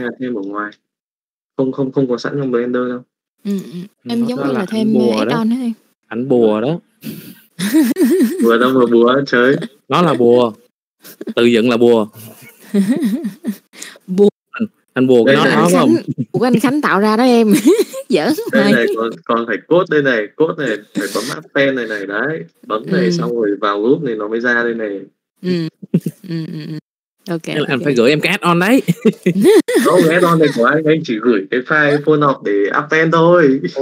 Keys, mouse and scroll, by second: 11.8 click, 12.7 click, 13.2 middle click, 13.5 n, 22.8 click, 27.0 Delete, 28.8 n, 29.6 click.